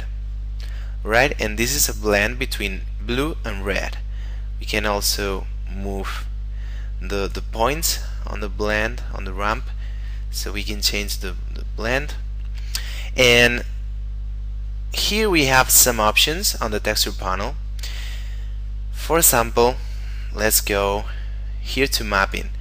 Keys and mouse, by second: 4.7 click, 7.9 click, 11.2 click, 12.5 middle click, 20.2 middle click, 22.2 click.